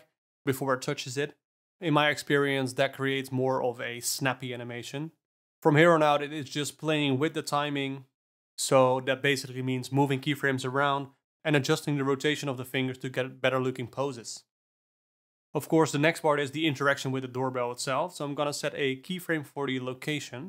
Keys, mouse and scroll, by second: 2.7 space, 5.1 space, 5.4 a, 5.5 g, 5.7-6.9 drag, 6.9-8.7 typing, 7.3 click, 8.1 click, 8.9-9.7 drag, 11.3 r, 13.6 Down, 13.8 space, 14.1 space, 14.2 Down, 14.3 Down, 14.7 space, 15.1 space, 15.3 Right, 19.7 ctrl+a.